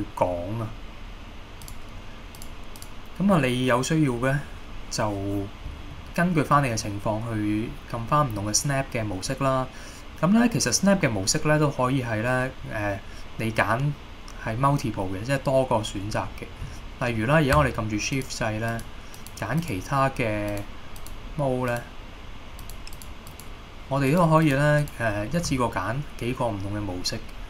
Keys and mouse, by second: 3.0-27.4 drag.